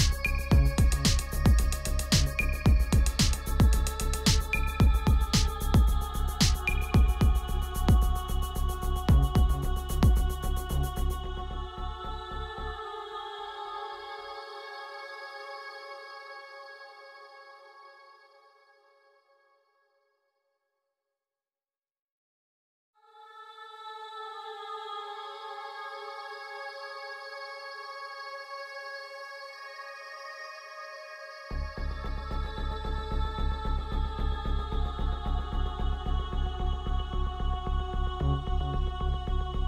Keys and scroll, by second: 1.8 Return, 11.8 t, 13.1-18.3 typing, 35.8 space, 36.7 v.